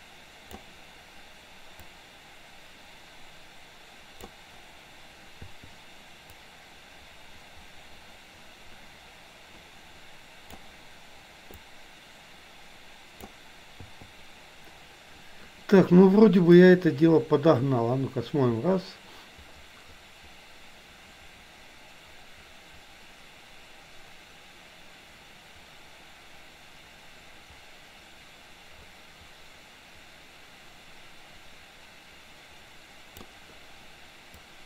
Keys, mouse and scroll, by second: 1.8 click, 2.6-4.5 drag, 5.5 i, 6.5-10.7 drag, 11.8-13.5 drag, 14.0 i, 16.6-33.3 drag.